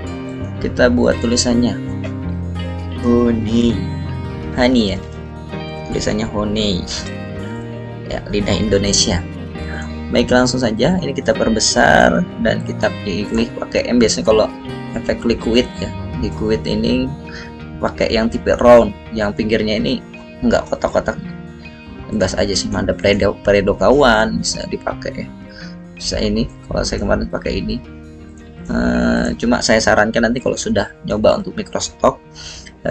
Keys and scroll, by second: 0.0-0.5 typing, 2.2-7.9 typing, 8.6 ctrl+a, 31.3 ctrl+z.